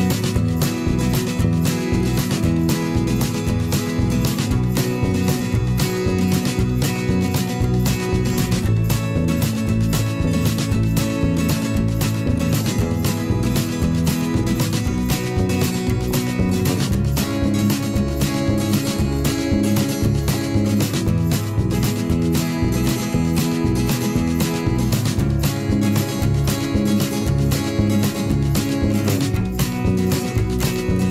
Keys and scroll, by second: 20.7 ctrl+0, 22.8 ctrl+z, 25.1 ctrl+a, 29.9 m.